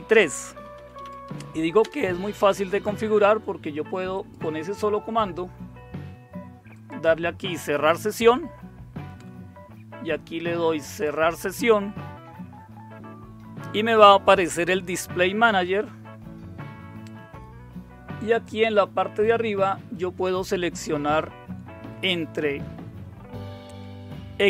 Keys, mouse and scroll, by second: 0.5-1.9 typing, 4.2 click, 6.7 click, 7.8 typing, 10.9 click, 18.4 click.